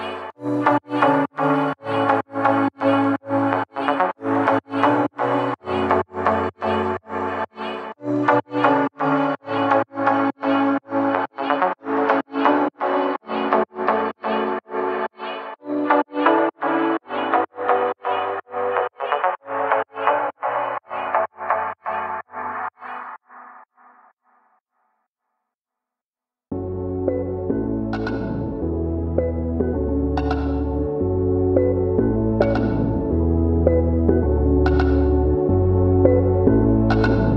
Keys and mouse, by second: 0.0 shift+middle click, 0.2 middle click, 1.1 middle click, 1.8 middle click, 2.0 shift+middle click, 2.3 ctrl+b, 3.8 shift+middle click, 4.1 shift+z, 4.2 shift+z, 4.4 middle click, 4.9 shift+middle click, 5.3 ctrl+r, 5.8 Tab, 6.1 shift+middle click, 6.3 shift+middle click, 6.7 `, 7.3 click, 7.8 Tab, 8.1 shift+middle click, 8.5 ctrl+r, 9.2 ctrl+r, 9.7 shift+middle click, 9.9 shift+middle click, 10.2 ctrl+r, 11.0 shift+middle click, 11.4 ctrl+r, 12.2 ctrl+r, 13.1 shift+middle click, 13.3 shift+z, 13.4 shift+z, 13.9 g, 14.8 shift+middle click, 15.2 ctrl+r, 15.9 shift+middle click, 16.2 ctrl+b, 17.8 shift+middle click, 18.5 ctrl+r, 19.7 ctrl+r, 20.4 shift+middle click, 20.7 shift+middle click, 21.0 shift+middle click, 21.3 shift+middle click, 22.9 Tab, 23.4 click, 23.9 shift+middle click, 24.1 Tab, 24.4 shift+middle click, 24.7 shift+middle click, 25.2 shift+z, 25.4 a, 25.7 a, 25.7 c, 26.8-31.7 typing, 27.4 shift+middle click, 28.1 click, 28.8 middle click, 29.0 shift+middle click, 29.2 middle click, 30.2 middle click, 31.4 shift+click, 31.8 middle click, 32.1 click, 33.3 middle click, 34.4 2, 35.1 middle click, 35.3 middle click, 35.6 shift+middle click, 35.8 middle click, 36.0 shift+middle click, 36.2 middle click, 36.5 ctrl+b.